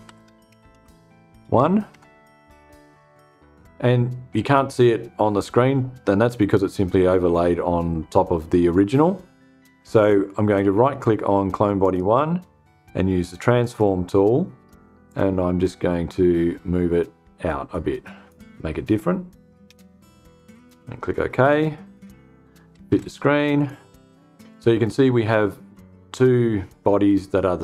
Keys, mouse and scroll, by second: 0.0-1.0 typing, 1.4 Return, 11.3 right click, 13.0 click, 14.5-17.9 drag, 19.1 Return, 20.9 click, 22.1-22.9 typing, 23.0 click.